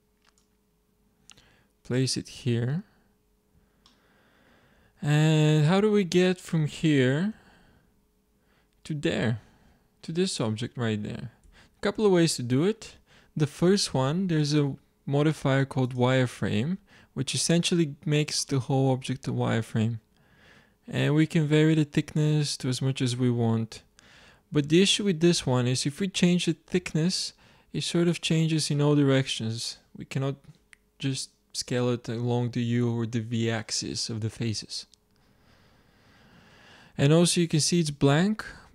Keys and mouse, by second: 0.8-2.0 drag, 2.5-5.7 middle drag, 7.3 shift+z, 11.4 z, 14.7-16.2 drag, 16.2 middle click, 16.5 z, 20.0 middle drag, 20.9-22.7 drag, 22.7 middle click.